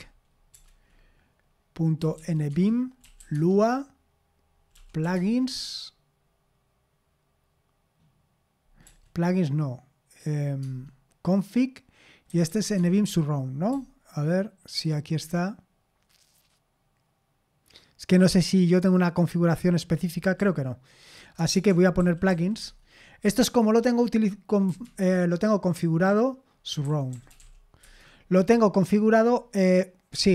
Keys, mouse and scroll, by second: 0.0-3.5 typing, 4.7 typing, 5.1 Tab, 8.8 BackSpace, 9.0 BackSpace, 9.2-10.1 BackSpace, 10.6 Tab, 12.0-14.8 typing, 20.4-22.3 typing, 22.6 Tab, 23.2 Return, 24.8 typing, 26.4-27.9 typing.